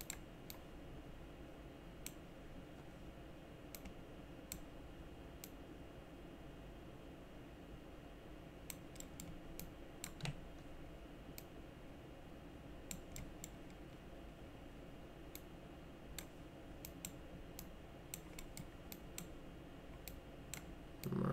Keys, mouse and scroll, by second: 0.0 click, 0.5-2.0 drag, 3.7 click, 5.4-8.7 drag, 9.0 middle click, 9.6 click, 11.4-12.9 drag, 13.2 middle click, 15.4 click, 16.9 click, 17.6 click, 18.4 middle click, 18.9 click, 20.1 click, 21.0 click.